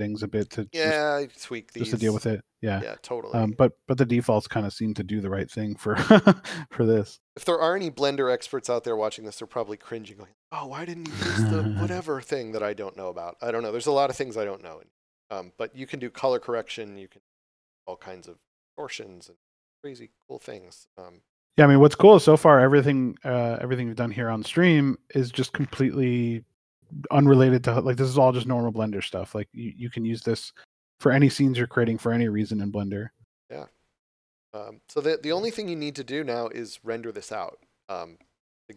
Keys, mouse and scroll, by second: 11.1 click, 21.0 scroll down 1, 25.9 scroll down 1, 26.9 scroll up 1, 35.5 scroll down 1.